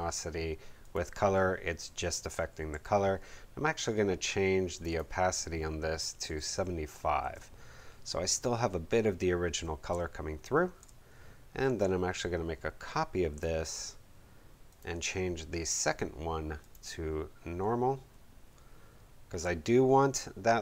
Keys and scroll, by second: 2.7 v, 6.2 7, 6.5 5, 7.1 Page_Up, 9.8 space.